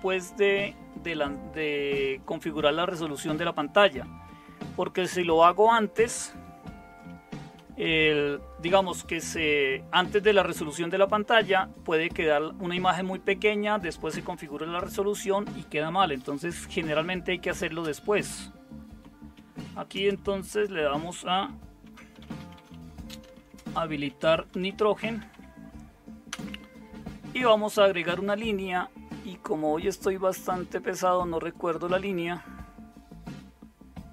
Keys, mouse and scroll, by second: 0.1 Down, 4.0 Up, 4.2 Up, 4.4 Up, 4.6 Up, 6.8 Up, 7.6 Down, 16.2 Down, 16.3 Down, 16.5 Down, 16.9 Down, 17.8 Return, 19.3 #, 19.9 space, 21.6-26.3 typing.